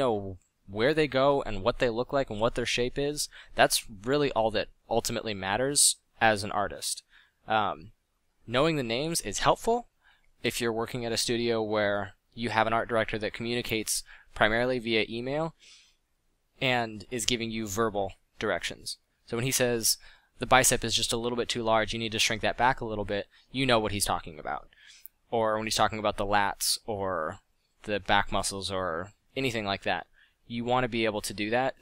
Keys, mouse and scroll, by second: 2.9 f, 12.7 f, 21.7 f, 23.9 f, 24.5 f, 26.3 f.